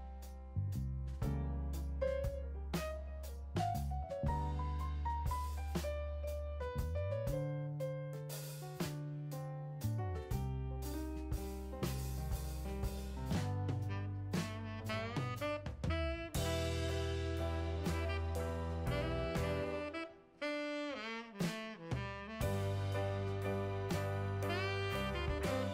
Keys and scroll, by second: 0.4 Down, 2.7 Return, 16.3-17.2 typing.